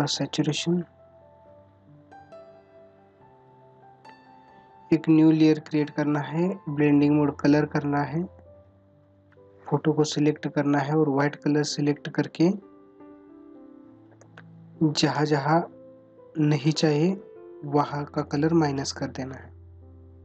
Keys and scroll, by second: 14.2 space.